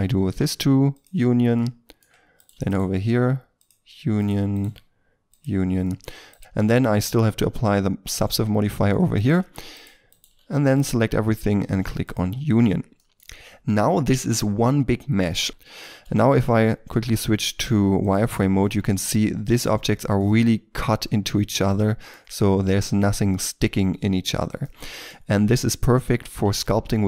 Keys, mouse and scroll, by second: 1.5 middle click, 2.3 right click, 2.6 shift+right click, 4.1 right click, 4.5 shift+right click, 5.8 middle click, 6.2 right click, 6.4 shift+middle click, 8.6 middle click, 9.1 right click, 9.7 shift+right click, 10.6 middle click, 15.5-15.8 scroll down 1, 15.8 shift+middle click, 17.1 z, 18.4 scroll up 1, 18.6 middle click, 24.3-24.6 scroll down 1, 24.6 middle click, 25.9 z, 26.9-27.0 scroll down 1.